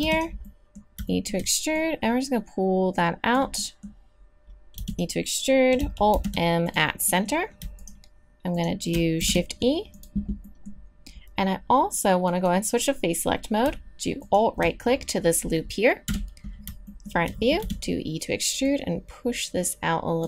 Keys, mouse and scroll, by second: 0.0 e, 1.1 middle click, 1.7-3.2 drag, 4.1 middle click, 4.8 e, 6.1 alt+m, 9.2 shift+e, 16.0 KP_1, 17.6 e, 18.6 click.